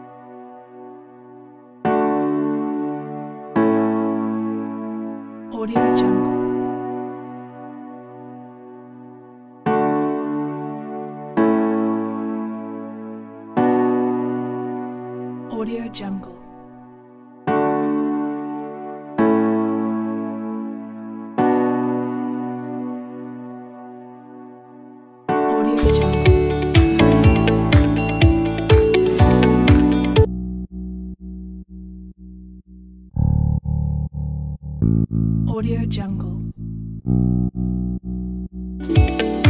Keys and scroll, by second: 29.5 s, 38.7 s.